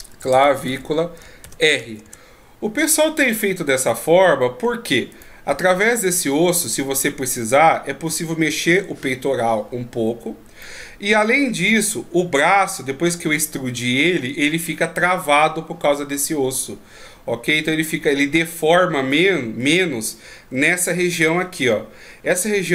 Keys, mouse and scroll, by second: 3.9 middle click, 5.1 right click, 6.7 middle click, 10.6 middle click, 19.1 middle click, 20.7-21.5 shift+scroll down 5, 21.3 middle click, 22.5 d, 22.6 click.